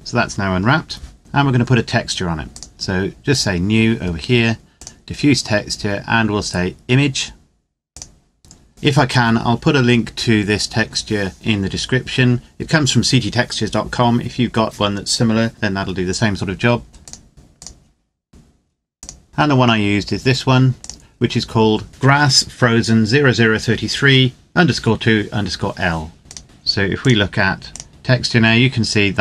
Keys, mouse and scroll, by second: 2.4 click, 7.7 click, 16.9 click, 20.5 click, 26.2 click.